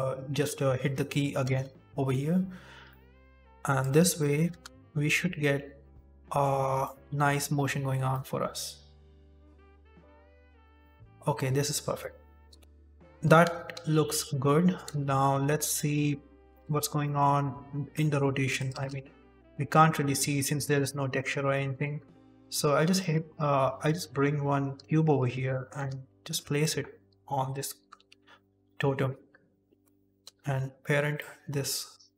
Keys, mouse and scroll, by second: 1.0 shift+middle click, 1.4 z, 1.8-2.8 scroll up 2, 2.8 middle click, 3.7 click, 4.1 shift+middle click, 4.4 shift+space, 5.9 middle click, 6.8 shift+middle click, 8.0 middle click, 10.0 middle click, 10.7 shift+middle click, 12.5 ctrl+s, 12.6 scroll up 3, 12.6 z, 13.2 shift+space, 13.7 z, 14.4-14.9 scroll down 2, 14.9 KP_7, 15.7 shift+middle click, 16.4 click, 17.0 shift+middle click, 17.6-18.5 scroll up 7, 17.9 shift+middle click, 18.5 click, 18.6 shift+a, 20.1 s, 21.0-21.5 scroll down 12, 21.8 s, 22.4 g, 23.1-23.5 scroll up 5, 23.5 s, 24.1 scroll up 2, 24.7 s, 25.2 scroll up 1, 25.4 middle click, 25.7 g, 26.9 s, 27.8 g, 28.6 shift+middle click, 29.1 shift+right click, 30.1 ctrl+p, 31.5-32.1 scroll down 7, 32.0 shift+middle click.